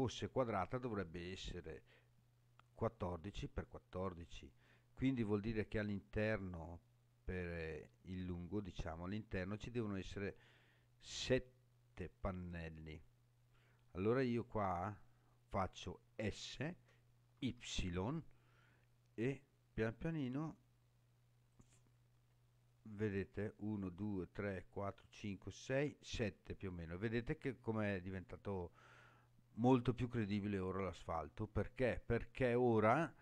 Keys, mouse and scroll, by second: 17.3 y, 21.5 click, 22.2-24.0 scroll up 6, 26.6-28.6 scroll up 7, 28.6-29.5 scroll down 5, 31.9-33.2 scroll up 6.